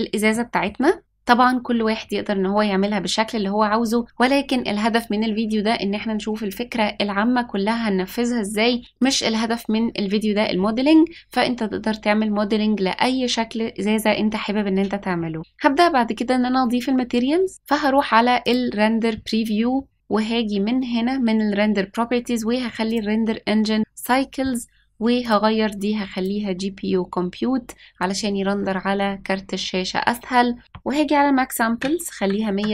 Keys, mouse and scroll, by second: 0.3 middle click, 15.1 middle click, 18.6 click, 19.9 click, 22.8-23.9 drag, 25.2-28.0 drag, 30.6-32.5 drag.